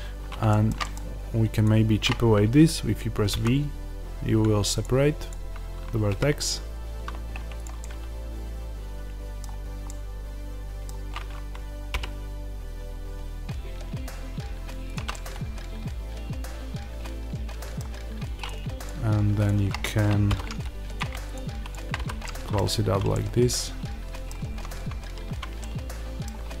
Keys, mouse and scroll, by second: 0.0-0.4 scroll up 1, 1.5 click, 3.2 v, 5.2 click, 6.0 g, 7.5 click, 7.7-14.8 middle drag, 11.8 g, 14.8 click, 15.0-18.4 middle drag, 18.4 click, 20.2 f, 20.9 click, 21.9 f, 22.2-26.6 middle drag, 22.7 Tab, 24.4-25.1 scroll up 1, 25.1 Tab.